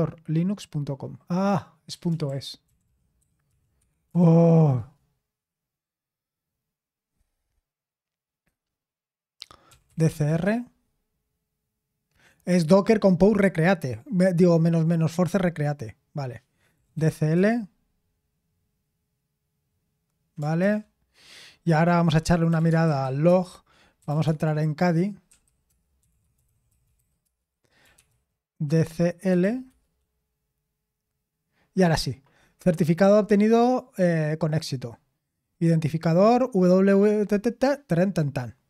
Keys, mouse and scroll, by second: 1.8-5.1 typing, 9.4-10.5 typing, 12.7 typing, 16.4-17.5 typing, 20.6 ctrl+c, 22.2-29.9 typing, 25.6 Return.